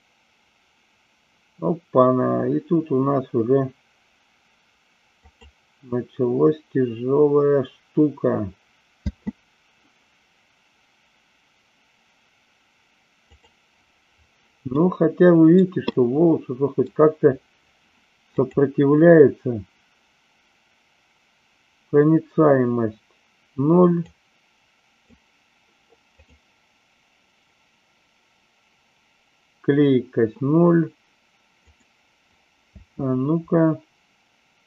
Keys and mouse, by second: 10.2 space, 13.2 click, 14.7-15.6 middle drag, 16.0-16.9 middle drag, 18.3 click, 24.1-26.3 drag, 31.7 click, 32.6 space.